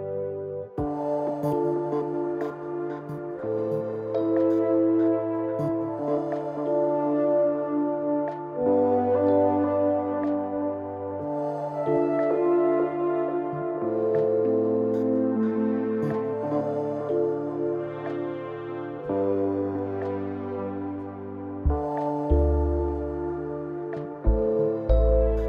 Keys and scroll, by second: 4.6 0, 9.7 ctrl+s, 11.3 u, 12.5 ctrl+d, 16.0 [.